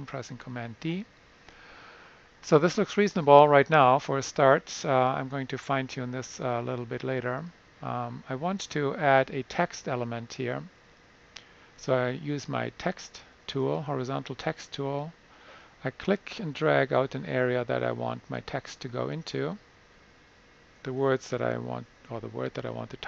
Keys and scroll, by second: 0.4 super+d, 20.8-22.5 typing.